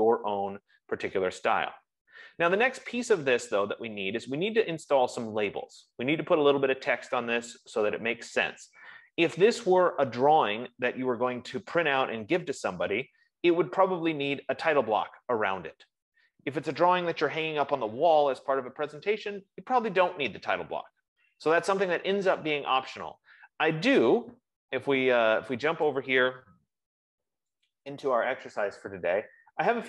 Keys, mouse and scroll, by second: 22.6 F15, 26.7 click, 28.3 click, 29.6 scroll down 1.